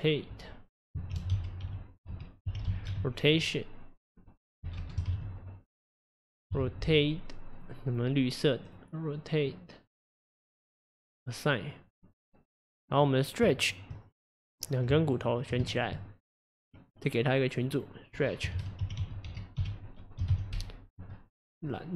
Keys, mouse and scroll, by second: 0.0-3.1 drag, 4.8 BackSpace, 8.8-10.2 drag, 10.9 click, 11.7 click, 13.0 click, 13.7 shift+click, 14.3 click, 15.2 ctrl+click, 15.7 shift+click, 16.8-17.7 drag, 17.8-20.9 drag.